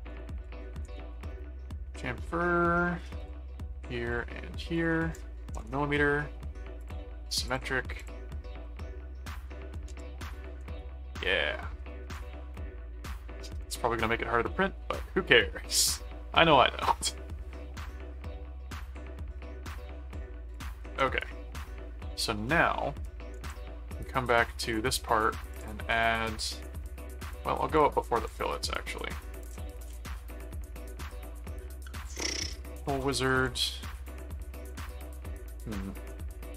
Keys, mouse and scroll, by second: 0.0-1.4 typing, 3.2 click, 4.1 click, 4.7 click, 6.8 click, 7.5 click, 8.6 middle click, 9.9 ctrl+7, 10.4 ctrl+click, 10.7 ctrl+s, 11.6 ctrl+Tab, 13.7 middle click, 16.4 middle click, 17.7-19.1 middle drag, 19.5 middle click, 20.5 click, 21.0 ctrl+Tab, 22.5 middle click, 23.4 ctrl+Tab, 24.7 click, 25.5 click, 27.7 click, 29.4 click, 29.8 s, 32.3-34.1 typing.